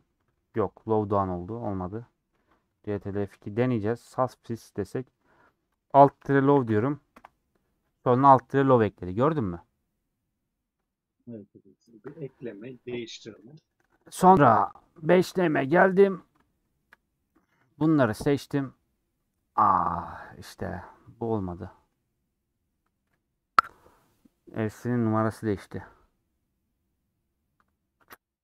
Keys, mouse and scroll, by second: 4.0 ctrl+F2, 14.7-17.7 drag.